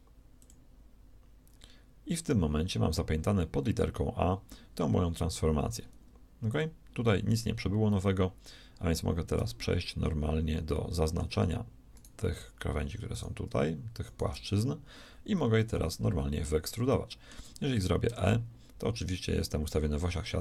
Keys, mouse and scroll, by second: 15.8 KP_3, 18.0 e.